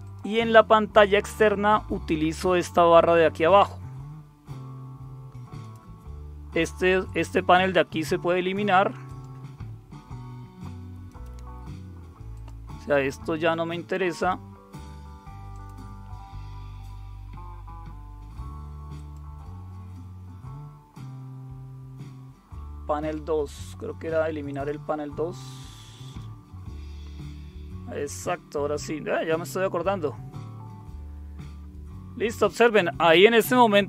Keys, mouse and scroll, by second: 0.0 click, 5.6-6.7 right drag, 7.0-9.3 drag, 11.0 right click, 12.3 click, 12.7 click, 14.1-15.5 drag, 15.5 right click, 18.9 click, 24.5 click, 26.0 click.